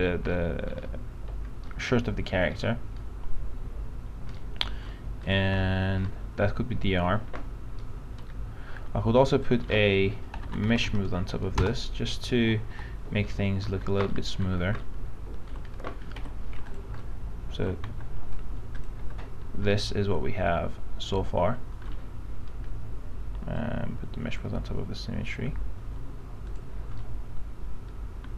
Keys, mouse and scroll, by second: 0.5-3.0 alt+middle drag, 5.4 click, 5.8 alt+middle click, 7.4 f, 8.3-9.5 scroll down 1, 9.5 click, 10.4-11.8 typing, 12.9 p, 13.5 alt+middle click, 14.4-15.7 alt+middle drag, 16.3 alt+F4, 16.9 click, 17.2 alt+middle click, 18.0 alt+z, 18.9 click, 19.2 click, 19.9-22.5 alt+middle drag, 23.7-25.5 drag, 27.2-28.3 alt+middle drag.